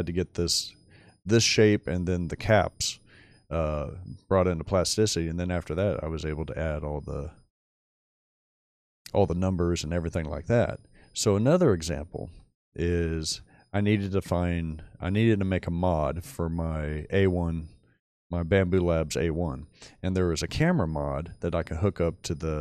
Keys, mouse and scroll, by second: 7.4-7.9 scroll down 2, 7.7 middle click, 8.8 shift+click, 10.4-11.4 shift+middle drag, 13.8-14.2 middle drag, 14.8 middle click, 20.0-20.5 middle drag, 21.7-22.1 middle drag.